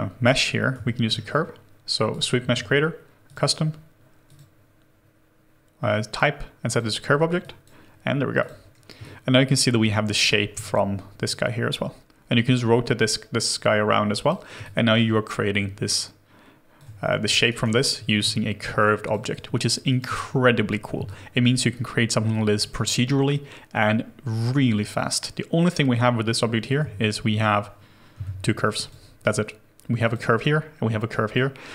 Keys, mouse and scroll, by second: 0.2-0.7 scroll up 1, 0.7 scroll, 0.8 alt+middle click, 9.0 alt+click, 10.5 alt+click, 10.5 e, 14.6 alt+click, 17.4 alt+right click, 17.7 alt+click, 18.2 w, 19.6 alt+right click, 19.9 alt+click, 27.3 shift+click, 30.0 h, 30.8 scroll down 1.